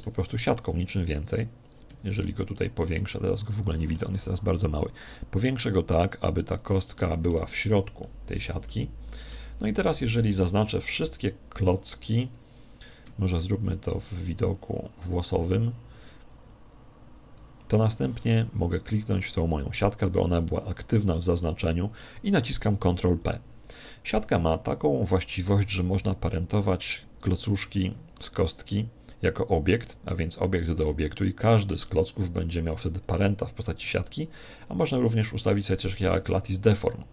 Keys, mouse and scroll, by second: 2.6-4.9 middle drag, 2.9 z, 4.1 s, 6.6 click, 6.9-10.6 middle drag, 7.6 z, 10.6 click, 10.9-13.9 typing, 11.6 middle click, 13.1 Escape, 18.8 right click, 20.4-23.0 middle drag, 23.2 ctrl+p.